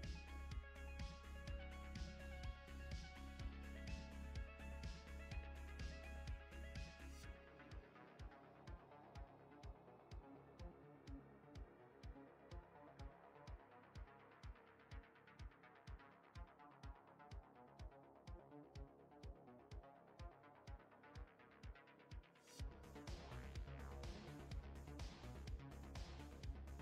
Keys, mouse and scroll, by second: 10.6 click, 12.0 middle click, 15.9 click, 16.9 click, 18.4 shift+middle click, 19.3 middle click, 21.8 click, 22.8 middle click, 25.8 x.